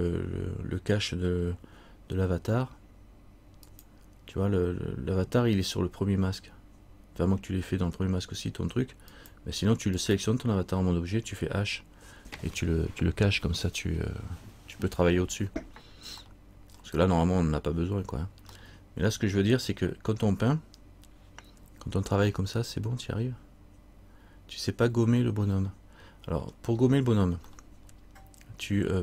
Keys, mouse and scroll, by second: 3.8 shift+click, 9.3 shift+click, 16.4 middle click, 16.9-18.6 scroll down 1, 18.7 middle click, 20.3 scroll up 1, 25.7 scroll up 1, 25.8 middle click, 27.6 scroll down 1, 27.7 middle click.